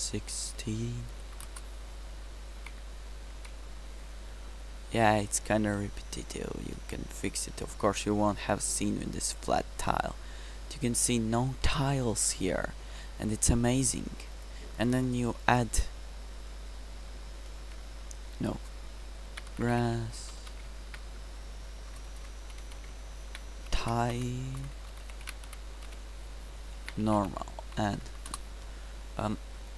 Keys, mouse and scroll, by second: 2.6 ctrl+c, 3.6 ctrl+v, 9.9-11.4 middle drag, 14.4-17.1 drag, 17.3 ctrl+v, 18.4-20.1 drag, 20.4 d, 21.3 Insert, 22.2 BackSpace, 22.7 s, 28.0 BackSpace, 28.2 BackSpace.